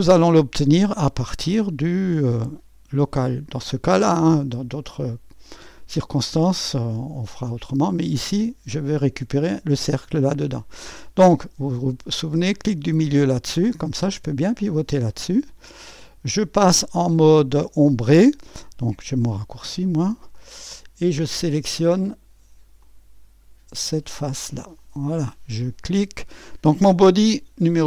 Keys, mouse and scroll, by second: 0.0 scroll up 2, 1.7 click, 4.0 space, 5.5 click, 7.5 middle click, 7.5-11.0 right drag, 12.7 middle click, 13.6-15.1 drag, 19.4 2, 20.3-22.2 drag, 22.9 click, 24.8 click.